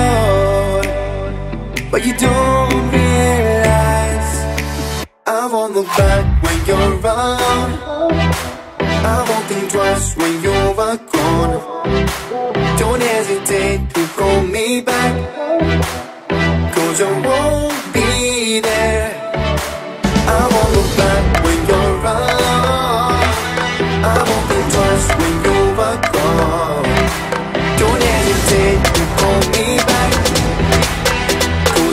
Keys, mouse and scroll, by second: 0.7-3.2 typing, 0.8 click, 2.8 Return, 3.3-3.8 scroll down 1, 3.8 click, 4.2 middle click, 4.6-5.3 scroll up 1, 5.4 shift+middle click, 6.7 shift+e, 7.0 space, 7.2 click, 10.0 m, 10.6 ctrl+click, 11.6 Up, 12.4-13.9 typing, 14.5 click, 15.6 ctrl+z, 16.1 click, 16.9-17.8 typing, 17.6 Return, 18.7 click, 19.6 p, 19.9 click, 21.0-23.0 typing, 23.9 click, 24.6-25.0 scroll up 1, 25.0 middle click, 25.4 scroll up 1, 26.6 click, 27.4 scroll down 1, 27.9 click, 28.4 shift+middle click, 30.3 t, 30.6 click, 31.4-31.9 typing.